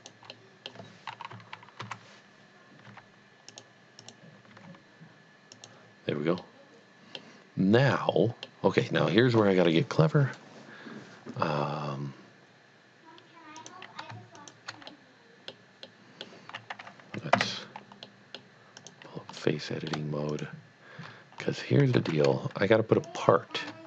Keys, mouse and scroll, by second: 0.1 click, 0.4 middle click, 0.7 middle click, 1.3 KP_3, 1.8 KP_1, 2.9 g, 3.5 click, 4.0 click, 4.6 g, 5.6 click, 6.4 middle click, 6.9 middle click, 7.9 middle click, 8.4 middle click, 13.5 middle click, 14.0 click, 14.4 shift+click, 14.9 middle click, 15.2 middle click, 15.8 middle click, 17.3 3, 18.1 middle click, 18.8 click, 19.4 middle click, 20.3 shift+click, 22.2 z, 23.1 shift+click, 23.7 shift+click.